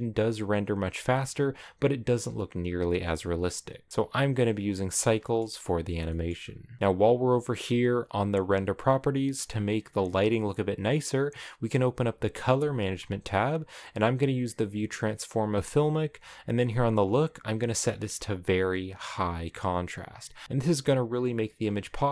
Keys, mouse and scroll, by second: 19.6 click.